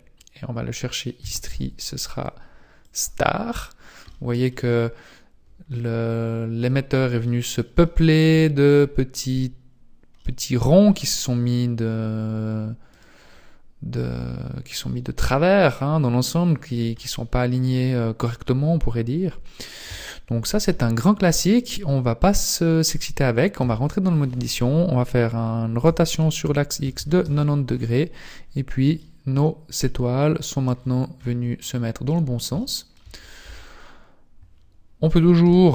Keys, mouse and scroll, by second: 4.1 middle click, 4.8 scroll up 4, 5.8 middle click, 6.9-7.2 scroll up 2, 7.2 middle click, 7.8 shift+middle click, 8.8 scroll up 2, 10.2 middle click, 10.9-11.5 scroll down 10, 11.9 scroll up 1, 12.9 right click, 17.1 middle click, 19.2-19.6 scroll up 4, 20.0 shift+middle click, 20.7-21.0 shift+scroll down 1, 21.2 scroll up 1, 21.3 middle click, 22.7 middle click, 23.6 Tab, 25.8 r, 28.0-28.8 scroll up 4, 29.0 middle click, 30.8-31.4 scroll down 10, 31.6 middle click, 32.6 shift+middle click, 33.5 Tab, 33.8-34.4 scroll up 2, 35.4 KP_0.